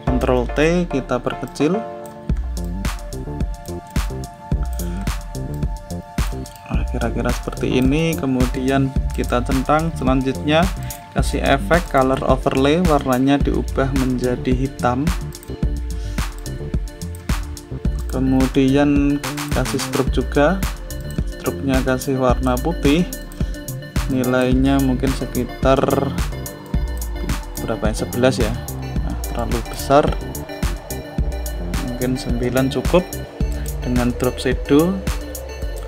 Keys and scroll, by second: 0.3 ctrl+t.